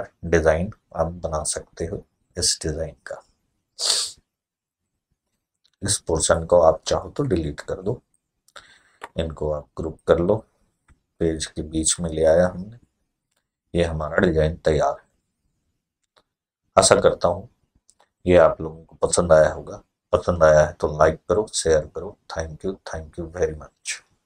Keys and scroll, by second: 7.0 Delete, 10.6 p, 11.7 F4.